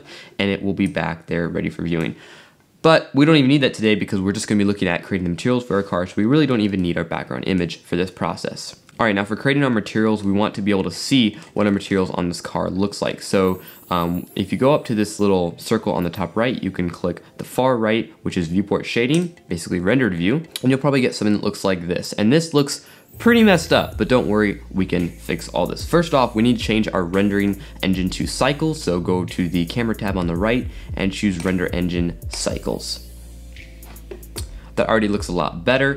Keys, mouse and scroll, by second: 1.1-3.3 drag, 3.3-12.1 middle drag, 12.1-12.5 scroll up 3, 13.1-20.4 shift+middle drag, 21.2-29.0 middle drag, 29.0 click, 32.4-34.8 drag.